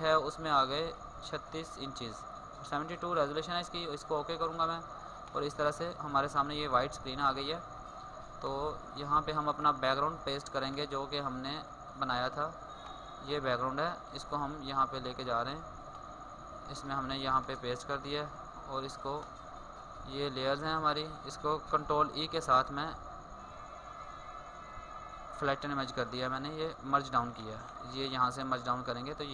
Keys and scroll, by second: 22.0 ctrl+e, 24.3 ctrl+e, 25.8 ctrl+z.